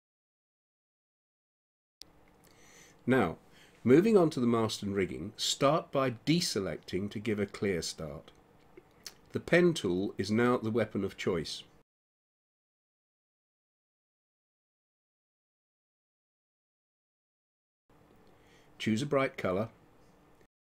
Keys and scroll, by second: 10.1 space.